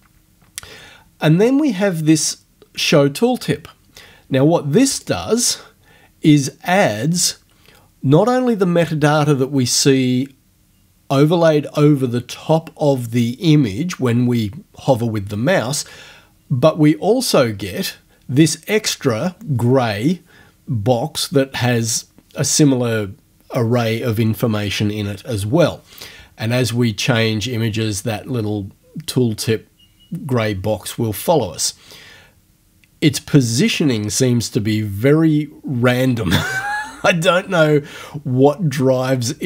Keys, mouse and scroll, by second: 4.9 click.